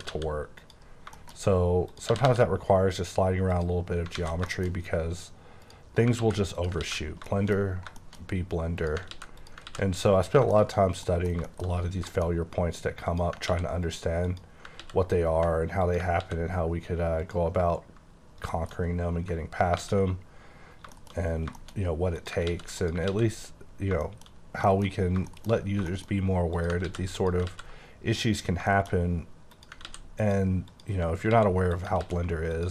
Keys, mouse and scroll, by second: 0.6 click, 0.9 scroll down 4, 1.1 shift+middle click, 1.3 shift+scroll up 3, 1.9 click, 2.1 typing, 3.5 click, 3.8 scroll down 5, 4.1 alt+a, 4.5 shift+middle click, 4.7-5.2 shift+scroll up 6, 5.6 click, 5.9 scroll up 4, 6.2 ctrl+x, 6.5 click, 6.8 ctrl+x, 7.0-7.8 scroll down 7, 7.3 shift+middle click, 8.0 shift+middle click, 8.2 scroll up 5, 8.8 click, 9.1 ctrl+x, 9.4 click, 9.7 ctrl+x, 9.9-10.9 scroll down 12, 10.5 shift+middle click, 11.0 middle click, 11.4 shift+middle click, 11.7-13.1 scroll up 13, 12.1 shift+middle click, 13.1 click, 13.4 ctrl+x, 13.9 click, 14.2 click, 14.8 ctrl+x, 15.8 click, 16.2 x, 17.2 click, 18.2-18.9 scroll down 6, 19.3-19.6 scroll up 4, 19.7 ctrl+x, 20.3-20.9 scroll down 9, 20.9 shift+middle click, 21.2-21.9 scroll up 10, 21.5 shift+middle click, 22.2 click, 22.4 x, 22.8 click, 23.1 x, 23.3-24.7 scroll down 15, 24.0 shift+middle click, 24.7 shift+middle click, 25.0 scroll up 5, 25.3 shift+middle click, 25.9 shift+middle click, 26.1 shift+scroll up 2, 26.5 click, 26.8 x, 27.1 click, 27.5 x, 28.3-28.6 scroll down 2, 28.7 shift+middle click, 29.0-29.5 scroll up 5, 29.5 click, 29.8 ctrl+x, 30.2 click, 30.7 click, 31.3 ctrl+x, 31.8 click, 32.0 ctrl+x, 32.6 click.